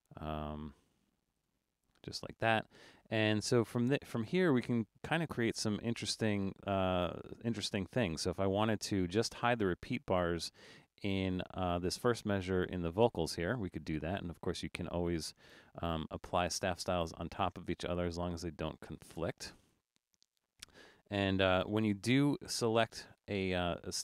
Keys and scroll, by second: 21.6 super+=, 22.1 super+=.